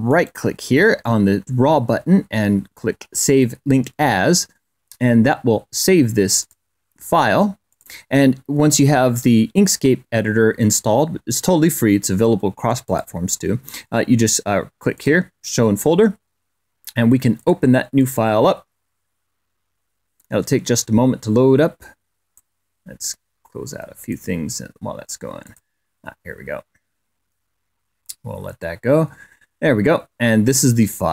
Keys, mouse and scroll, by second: 6.3 click, 7.5 click, 12.6 click, 14.7 click, 17.2 click, 17.7 click, 22.1-24.1 drag, 25.2 click, 30.7 middle click, 31.0-31.1 middle drag.